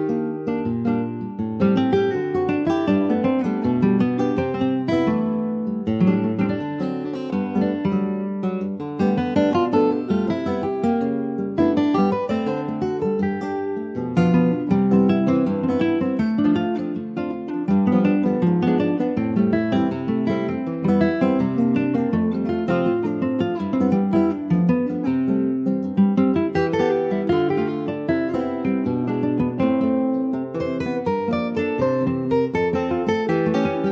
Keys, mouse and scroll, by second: 0.0-0.4 scroll up 2, 0.4 s, 1.5 click, 6.1 click, 6.4 Tab, 6.7 middle click, 7.3 ctrl+s, 7.5 click, 8.0 shift+middle click, 8.8 Tab, 9.2-9.7 scroll up 2, 9.7 Tab, 10.0 click, 10.8-12.1 middle drag, 12.1 t, 12.8 click, 13.5 ctrl+s, 13.9 click, 15.7 click, 16.0 shift+middle click, 16.3-17.0 scroll up 2, 17.0 click, 22.5 click, 23.0 s, 24.5-25.7 middle drag, 25.7 e, 27.3 click, 28.2 i, 30.6 middle click, 31.2 e, 33.5 middle click.